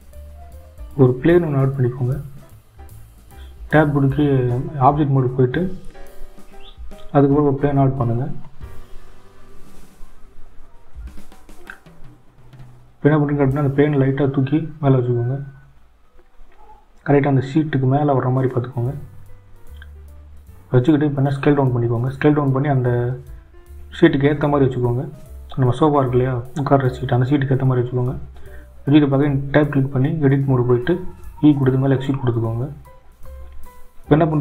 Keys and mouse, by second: 0.0-2.0 drag, 2.7 Tab, 3.5 shift+a, 7.5 g, 18.0 s, 22.9 Tab, 24.0 e.